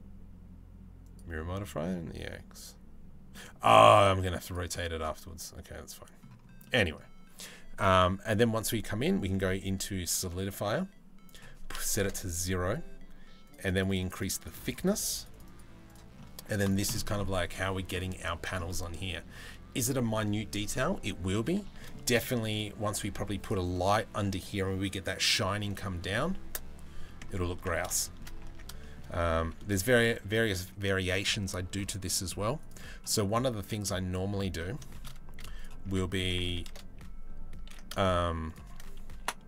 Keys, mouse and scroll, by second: 0.6 middle click, 2.9-3.3 middle drag, 4.0 click, 4.6-5.8 middle drag, 6.2 middle click, 7.4-9.8 drag, 10.1 middle click, 10.9 click, 15.8 middle click, 16.8 middle click, 21.5 middle click, 25.3 middle click, 26.8 middle click, 27.1 Tab, 27.6 shift+middle click, 28.1 Tab, 28.4 shift+middle click, 29.4 Tab, 33.9 Tab, 34.2 middle click, 34.5 shift+middle click, 35.8 s, 36.9-39.4 ctrl+drag, 37.3 ctrl+b, 38.8 Delete.